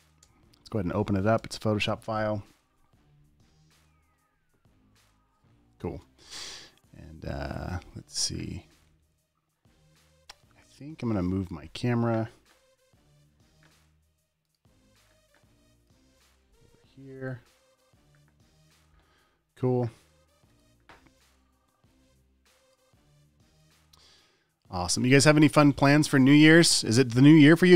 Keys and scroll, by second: 0.6 space, 2.1 super+o.